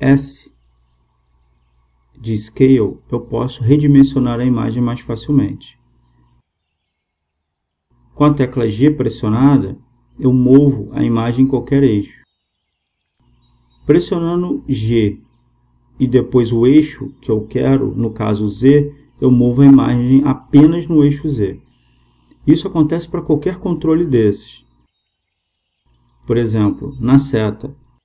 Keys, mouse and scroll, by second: 4.1 click, 10.1 g, 14.2 g, 25.6-27.8 right drag.